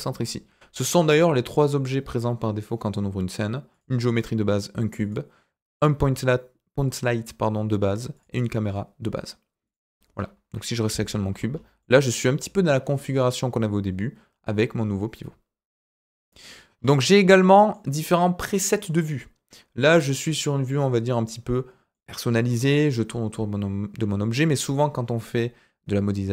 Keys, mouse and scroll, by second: 0.4-0.8 scroll down 3, 3.7 click, 5.0 click, 8.1 click, 9.6 click, 10.4 KP_Decimal, 11.3-11.6 scroll down 4, 11.8-16.2 middle drag, 16.7 scroll up 2, 17.3-24.5 middle drag.